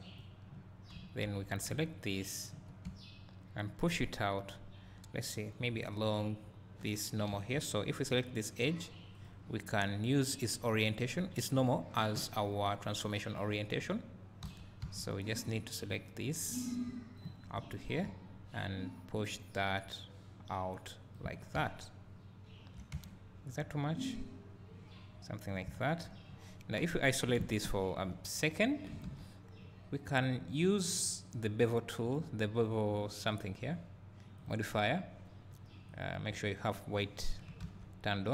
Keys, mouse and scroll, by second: 1.0 3, 2.5 ctrl+click, 7.4 2, 8.1 click, 10.7-15.9 drag, 14.5 3, 19.2-21.3 drag, 21.3 Tab, 21.5 `, 23.1 Tab, 24.0 click, 25.5 click, 25.8 Tab, 26.8 KP_Divide, 32.2 click, 33.6-36.0 drag.